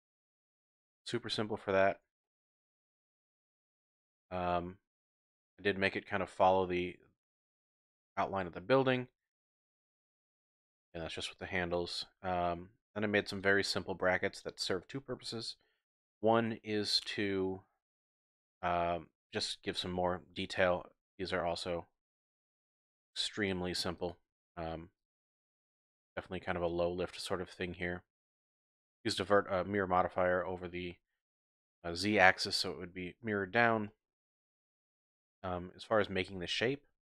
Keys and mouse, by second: 0.6 Delete, 2.2-2.5 shift+middle drag, 3.6 middle click, 3.6-4.2 drag, 6.3-6.9 drag, 6.9 middle click, 10.3 shift+middle click, 10.6 shift+drag, 11.7-12.3 drag, 12.8 Tab, 13.1 Tab, 13.4 click, 13.5 typing, 14.8-15.2 shift+drag, 15.7 click, 20.7 Tab, 21.2 click, 22.7 ctrl+click, 23.4 ctrl+click, 24.0 click, 25.0 click, 25.4-27.9 drag, 28.0 click, 28.1 typing, 33.2 Tab, 33.3 typing, 33.9 shift+click, 35.0 click, 36.0 Tab.